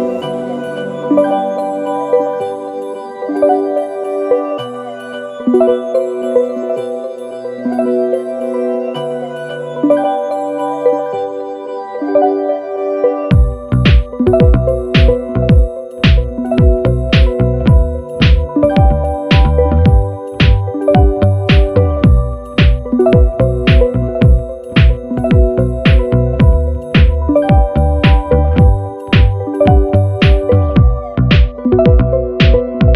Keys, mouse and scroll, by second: 1.1 shift+click, 2.0 shift+click, 3.0-4.8 shift+drag, 6.3 ctrl+d, 7.4-10.5 ctrl+drag, 11.1 Up, 12.9 click, 14.0 click, 14.7 click, 15.7 shift+click, 16.4 shift+click, 17.0 shift+click, 18.4 click, 19.3 click, 21.8 ctrl+a, 22.8 click, 23.6 click, 24.6 click, 25.4 click, 26.1-26.4 ctrl+scroll up 2, 26.7 ctrl+click, 27.6-29.3 drag, 29.8 click, 31.0 click, 32.2 click.